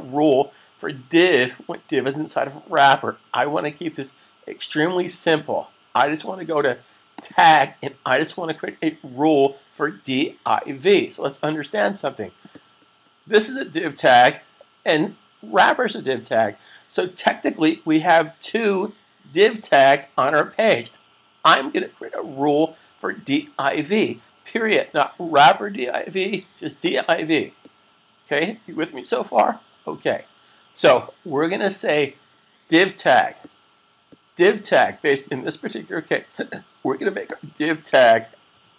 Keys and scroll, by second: 38.5-38.7 typing.